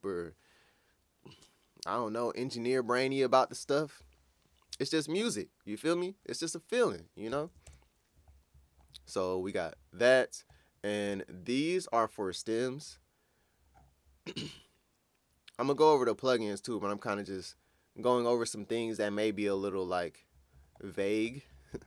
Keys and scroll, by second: 7.7 ctrl+scroll down 1.